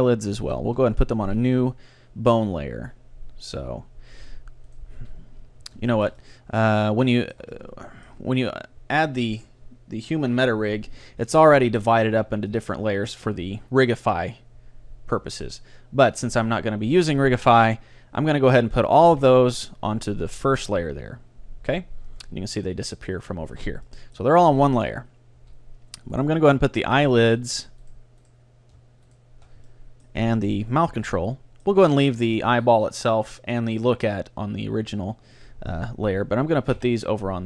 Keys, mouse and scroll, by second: 1.3 m, 4.3 middle click, 4.8-6.5 right drag, 5.0 a, 5.9-9.5 middle drag, 10.9 a, 12.6-14.3 drag, 14.7-17.1 middle drag, 16.2-18.1 drag, 19.1 m, 23.9-25.3 middle drag, 25.5 a, 26.2-32.5 right drag, 29.7-32.9 middle drag, 36.8 m.